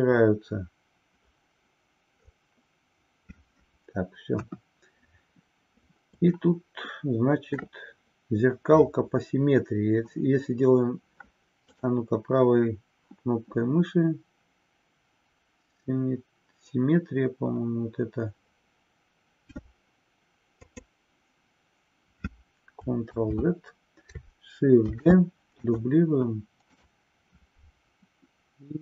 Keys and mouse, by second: 4.3 KP_1, 6.4-7.8 shift+middle drag, 23.0 ctrl+z, 24.9 shift+d, 27.6-28.8 right drag.